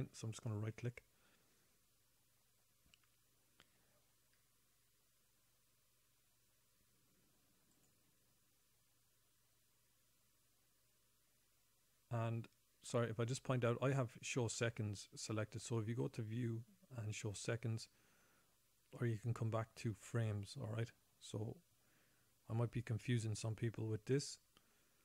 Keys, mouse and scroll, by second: 0.7 right click.